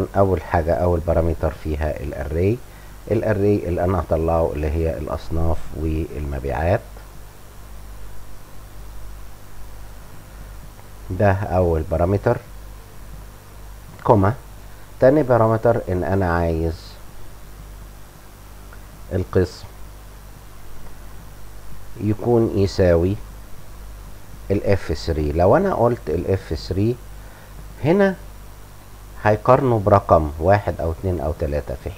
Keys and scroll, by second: 12.1 Home, 12.2 End, 12.4 Return, 12.4 Up, 12.6 /, 12.6 ., 12.6 ,, 13.3 ,, 23.1 =.